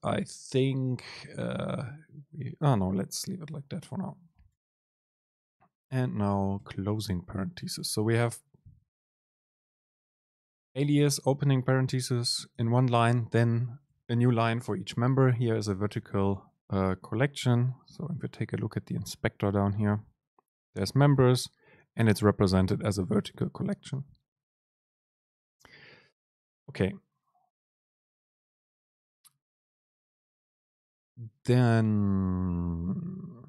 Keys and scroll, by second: 2.9 Down, 3.4 End, 4.0 Up, 4.2 End, 6.7 Up, 7.1 Down, 10.3 Right, 11.3 End, 11.5 Left, 12.6 Left, 13.9 Up, 14.1 Down, 14.8 Up, 15.5 super+Left, 16.4 Left.